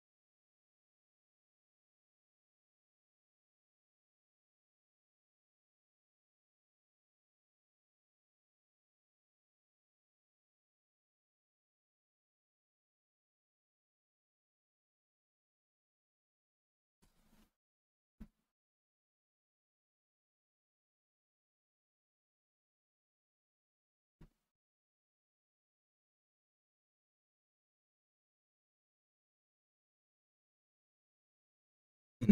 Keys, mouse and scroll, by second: 4.1-6.8 drag, 8.3 click, 8.8 click, 9.6-12.3 drag, 13.6 click, 15.0 click, 16.8 click, 17.3 click, 18.9 click, 19.5 click, 20.3 click, 20.7 click, 21.4 click, 22.0 click, 22.9-26.9 drag, 28.1 click, 30.0 click, 30.7-31.4 middle drag, 31.6-32.3 scroll down 4.